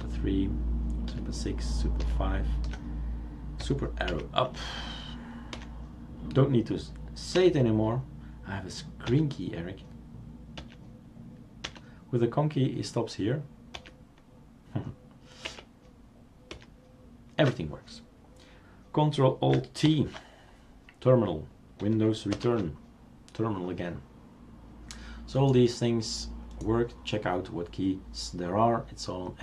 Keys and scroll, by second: 1.1 super+6, 2.0 super+5, 4.1 super+Up, 5.6 super+Down, 7.4 super+Left, 9.1 super+Right, 10.6 super+Right, 13.9 super+Right, 15.6 super+Up, 16.5 super+Down, 19.9 ctrl+alt+t, 22.3 super+Return.